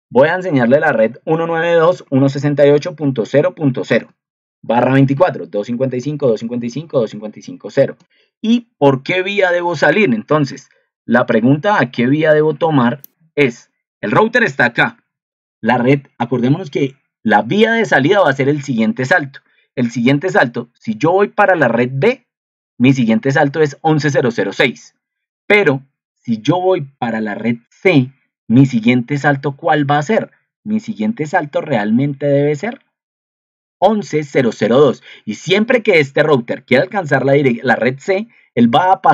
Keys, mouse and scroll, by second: 9.6 ctrl+2, 14.9 ctrl+2.